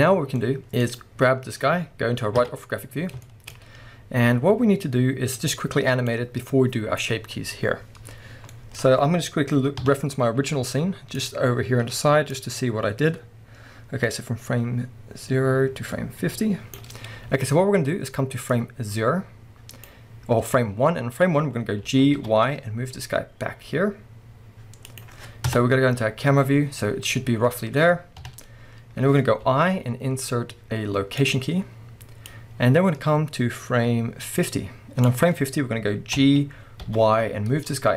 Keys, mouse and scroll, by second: 0.8 click, 2.4 KP_3, 2.9-3.2 scroll up 1, 3.2-5.3 shift+middle drag, 5.3-25.0 drag, 17.5-17.9 scroll down 1, 20.8-21.2 scroll down 1, 21.2-21.9 scroll up 1, 21.9 g, 25.5 KP_0, 26.6-28.2 scroll down 1, 28.2 KP_3, 28.8-29.5 scroll up 2, 29.5 i, 32.2-37.9 drag, 36.2 g.